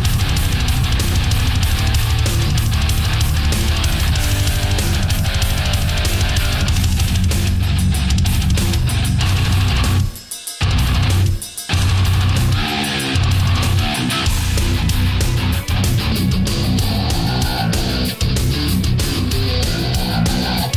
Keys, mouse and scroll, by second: 0.0 shift+middle click, 1.1 shift+right click, 1.8-2.5 shift+middle drag, 3.0-5.1 drag, 5.7 right click, 6.3 shift+right click, 7.0-8.7 drag, 9.1-12.7 middle drag, 15.7-16.7 middle drag, 17.5 right click, 18.2-19.9 drag, 20.0-20.7 middle drag.